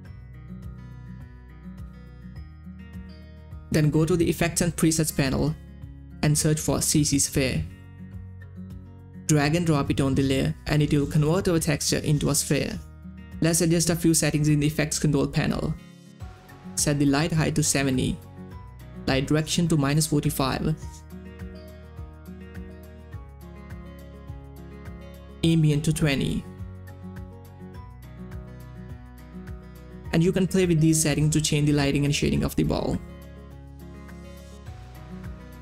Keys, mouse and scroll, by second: 0.7 s, 1.5 click, 2.7 2, 3.5 Return, 5.7 click, 7.5-8.9 typing, 9.9-13.4 drag, 17.0 click, 17.9 click, 18.0 typing, 18.9 Return, 20.4 click, 21.3-22.4 typing, 22.7 Return, 25.8 click, 25.8 typing, 26.5 Return, 34.5 Return.